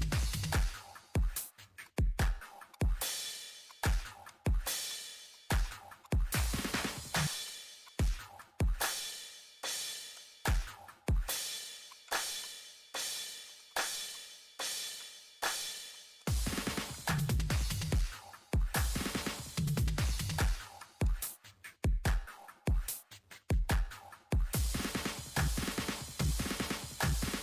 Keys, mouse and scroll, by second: 2.9 middle click, 3.7 click, 4.0 middle click, 4.3 click, 5.7 right click, 6.0 click, 8.0 scroll, 8.2 click, 9.3 ctrl+z, 9.8 ctrl+y, 10.1 click, 10.7 ctrl+shift+z, 11.7 ctrl+z, 11.9 click, 12.6 middle click, 12.9 click, 13.7 click, 13.8 middle click, 13.9 click, 16.9 click, 17.2 Escape, 17.4 click, 17.5-19.2 typing, 18.7 click, 19.4 Return, 19.7 click, 20.7 middle click, 21.7 ctrl+8, 22.3 click.